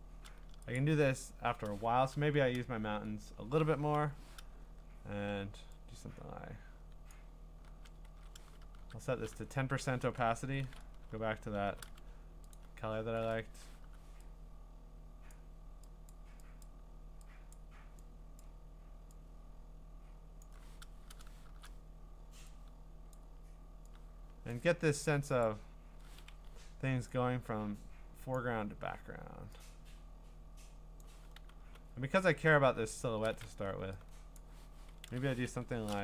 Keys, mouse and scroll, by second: 0.8 click, 1.9 !, 3.9 u, 7.1 click, 8.1 ctrl+z, 8.6 !, 11.7 b, 12.5-15.6 alt+drag, 13.8 u, 16.6 click, 17.5 click, 18.4 click, 20.4 click, 21.5 %, 23.2 click, 24.5 click, 25.4 click, 26.3 Escape, 28.3 click, 31.0 click, 31.6 b, 32.4-33.1 scroll, 33.6 b, 34.4 click, 35.0 ctrl+z, 35.6 l.